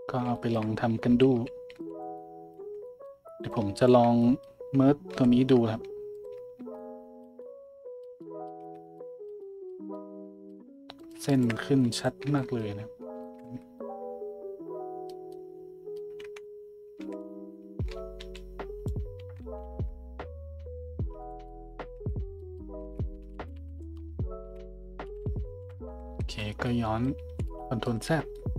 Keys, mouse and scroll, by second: 0.9 z, 1.3 a, 1.7 b, 2.6 z, 3.4 click, 3.7 shift+middle click, 5.1 m, 6.6 Tab, 8.2-11.0 middle drag, 8.6 Tab, 11.0 click, 11.3 shift+click, 11.8 m, 12.3 Tab, 13.5 Tab, 16.4-24.4 middle drag, 17.0 a, 17.9 z, 18.2 b, 19.2 z, 19.4 s, 21.9 Tab, 22.8 Tab, 23.3 ctrl+z, 23.6-24.5 ctrl+z, 25.1 ctrl+z, 25.3 ctrl+z, 25.6 ctrl+z, 26.2 Tab, 26.3-28.1 middle drag, 28.1 Tab.